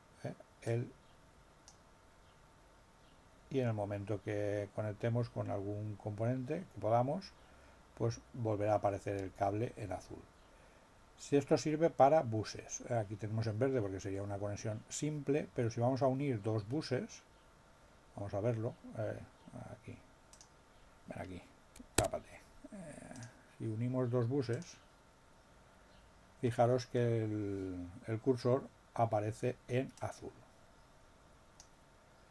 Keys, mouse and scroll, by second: 0.6-1.9 drag, 20.3 click, 21.9 Escape, 23.1 click, 24.5 click, 29.9-31.7 drag.